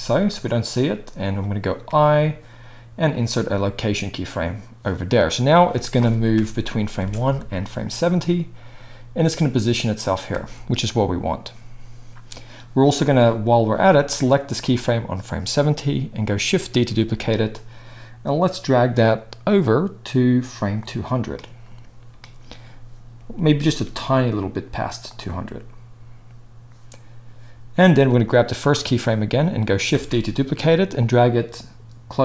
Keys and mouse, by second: 1.8 i, 6.3 KP_0, 6.9 space, 10.3 space, 14.1-20.8 drag, 16.7 shift+d, 20.8-28.2 middle drag, 23.8 g, 28.2-32.2 drag, 29.9 shift+d.